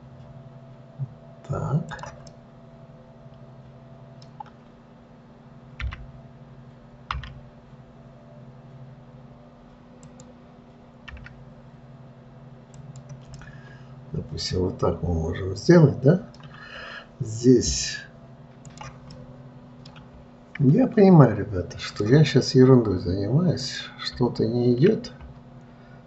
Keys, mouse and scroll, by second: 2.6-5.6 middle drag, 13.7-16.7 middle drag, 17.0 scroll up 2, 18.9 click, 19.5-22.2 middle drag, 22.2-24.1 drag.